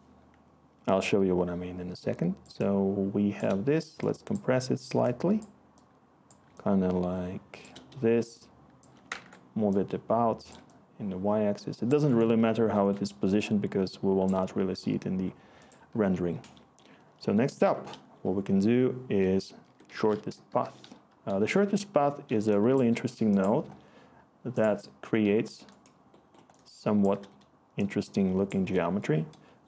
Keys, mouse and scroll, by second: 9.1-12.7 ctrl+z, 12.8-14.2 ctrl+z, 15.6 ctrl+z, 19.6-21.3 typing, 21.4 Return, 22.2 click, 22.7 click, 25.2 click.